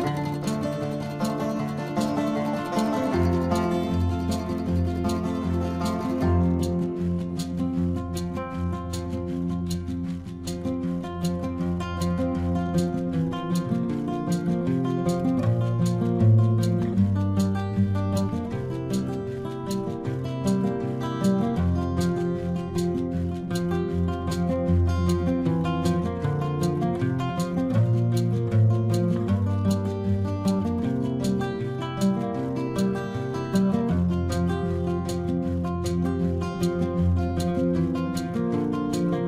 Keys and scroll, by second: 0.4 ctrl+alt+z, 2.2 ctrl+-, 4.0 ctrl+-, 5.7 ctrl+alt+z, 8.4 ctrl+-, 9.8 space, 23.0 ctrl+-, 23.9 space, 27.6 ctrl+alt+z, 29.5 ctrl+alt+z.